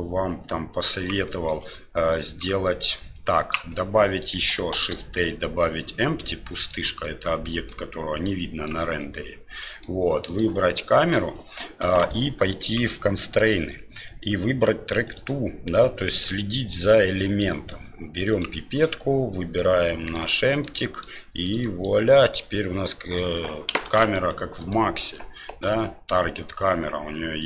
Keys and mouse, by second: 0.4 click, 1.3 middle click, 3.0 click, 3.8-4.4 middle drag, 4.7 shift+a, 7.0-7.7 middle drag, 8.3-9.1 drag, 9.1-9.8 middle drag, 10.3 right click, 10.7-11.1 middle drag, 12.6 click, 14.0-15.2 drag, 16.2 middle click, 20.6 middle click, 21.4 right click, 21.6 right click, 22.3-23.7 right drag, 23.8 ctrl+z, 24.6 right click, 25.6 g.